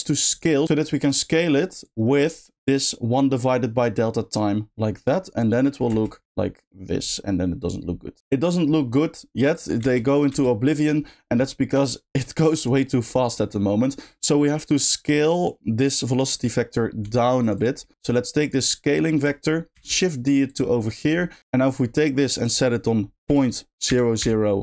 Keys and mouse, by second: 0.4-4.3 drag, 5.4 click, 5.8 space, 9.5 click, 9.8 space, 11.7 click, 11.9 click, 12.5 click, 13.3 middle click, 14.3 middle click, 16.3 click, 17.0 g, 17.5 click, 17.8 middle click, 18.4 click, 20.4 shift+click, 20.8 shift+middle click, 22.5-24.6 drag, 24.2 0.